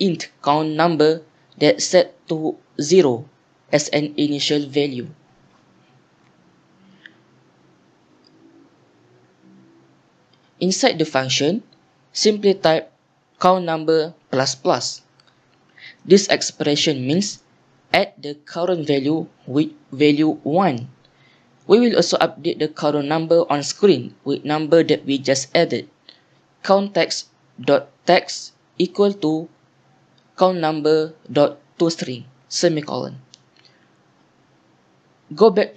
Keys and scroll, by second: 0.0-2.0 typing, 3.4-9.3 typing, 10.5-13.3 typing, 14.0 Down, 15.2 Tab, 16.4-17.5 typing, 19.3-20.6 typing, 23.9 Return, 25.9 Return, 26.3-32.3 typing, 27.4 Down, 27.7 Tab, 32.9 Tab, 33.5 End, 34.1 typing.